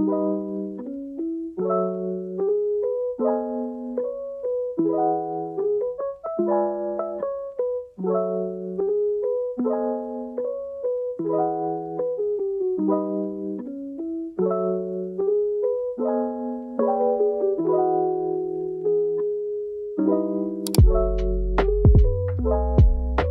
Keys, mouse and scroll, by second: 9.9 shift+a, 15.9-18.4 middle drag, 21.0 Tab.